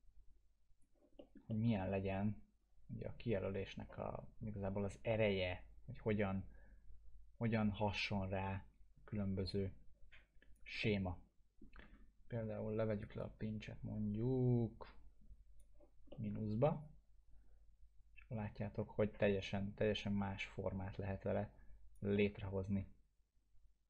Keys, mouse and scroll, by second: 1.2 middle click, 1.5 alt+middle click, 2.1-11.7 drag, 10.8-12.9 alt+middle drag, 12.9 right click, 13.2-15.7 drag, 16.1 alt+middle click, 16.8-22.1 drag, 22.1-23.8 alt+middle drag.